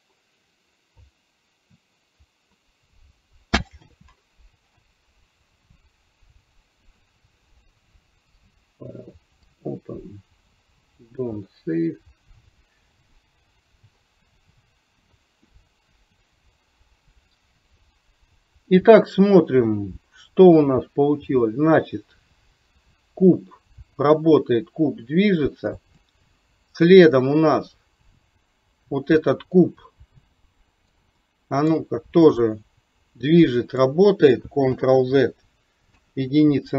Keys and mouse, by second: 8.4-11.3 drag, 19.8-26.1 drag, 26.8 click, 30.3-30.9 middle drag, 31.3-31.8 middle drag, 32.4-33.9 drag, 34.8 ctrl+z, 36.0 KP_1.